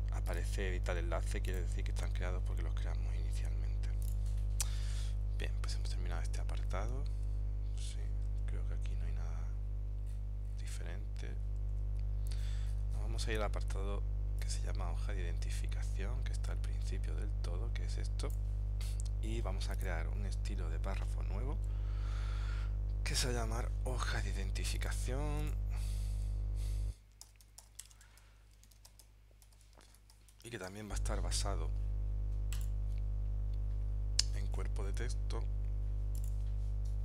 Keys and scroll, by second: 8.4 super+Tab, 11.8 super+Tab, 27.4 shift+h.